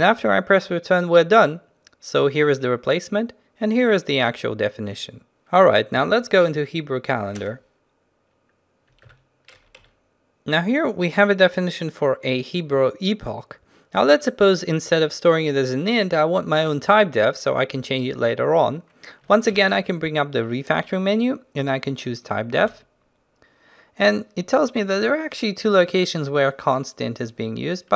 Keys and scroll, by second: 6.0 ctrl+n, 9.0 ctrl+b, 19.6 ctrl+alt+shift+t.